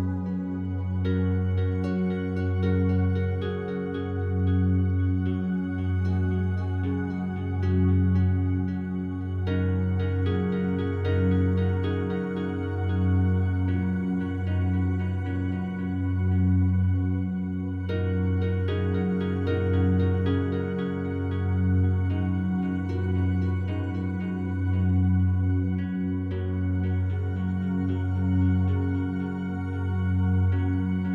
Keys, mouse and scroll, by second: 0.1 shift+click, 0.2 shift+click, 1.4 t, 4.2-9.0 drag, 9.9 1, 11.1-13.9 drag, 14.2 ctrl+click, 14.6 ctrl+z, 17.3 ctrl+z, 18.8-23.4 alt+drag, 23.4 1, 25.9-28.4 drag, 29.8 click, 30.6 ctrl+z.